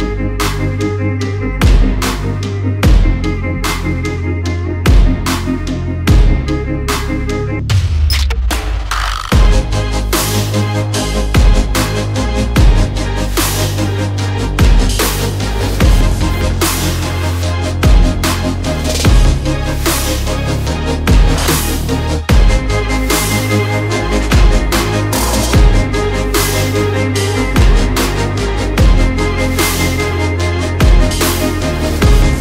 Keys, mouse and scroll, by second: 0.7 alt+click, 0.8 alt+click, 1.2 alt+scroll down 2, 4.8 click, 13.6 right click, 14.1 click, 14.6 alt+scroll up 1, 15.3 click, 16.7 shift+click, 16.9 shift+Left, 17.3 shift+Left, 17.7 shift+Right, 18.2 shift+Down, 18.6 shift+Up, 19.9 alt+click, 20.8 shift+Down, 22.0 click, 23.8 click, 24.6 right click, 25.1 click, 25.6 alt+scroll down 1, 26.0 alt+scroll up 1, 26.8 alt+click, 27.6 click, 30.3 alt+click, 31.1 click.